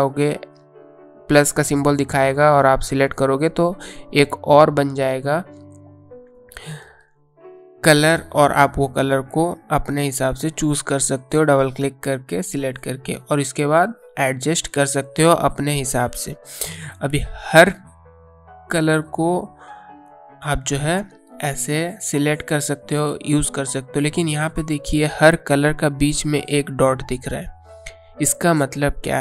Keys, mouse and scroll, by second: 1.1 click, 5.1 click.